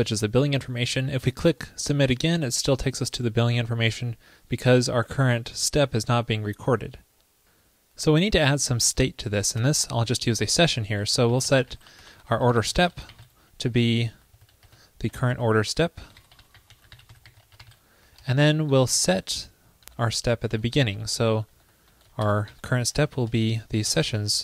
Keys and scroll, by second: 19.0 super+c, 19.9 super+Right, 20.0 super+v, 20.5 super+Left, 20.6 alt+Right.